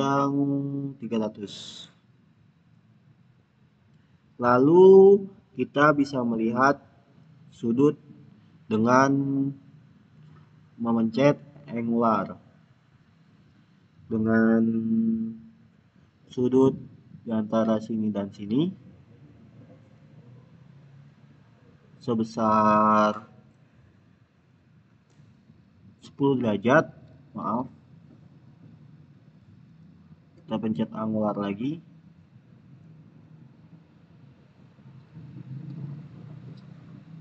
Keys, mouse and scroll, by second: 7.1 click, 12.3 click, 17.2 click, 20.8 click, 24.3 click, 27.0 click, 27.3 ctrl+z, 28.4 click, 31.9 click, 36.7 click.